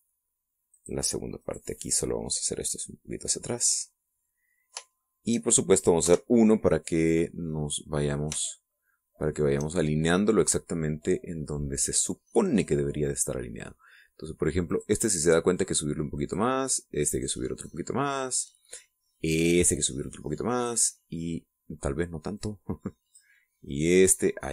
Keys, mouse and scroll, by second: 1.7 click, 2.4 right click, 3.3-4.7 drag, 4.7 scroll up 1, 4.8 middle click, 5.1 click, 6.0 shift+middle click, 6.2 shift+click, 6.5 shift+middle click, 7.0 KP_1, 9.5-10.5 shift+middle drag, 15.7 right click, 16.3-17.5 drag, 18.1 right click, 18.6 click, 20.4 right click, 20.9 click, 23.3-24.3 drag.